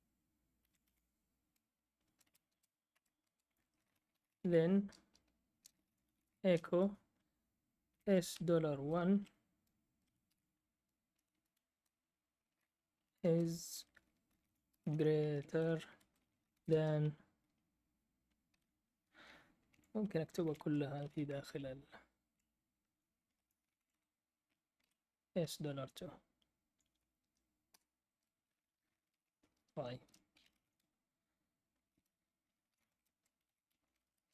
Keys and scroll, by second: 0.0-6.7 typing, 7.8 typing, 9.1 1, 10.2 shift+', 11.7 space, 12.7-17.0 typing, 18.5 ", 19.7 Left, 20.1-21.2 typing, 22.8-24.3 typing, 25.4 typing, 27.7 Return, 28.8-31.0 typing, 30.0 Escape, 32.3-34.3 typing.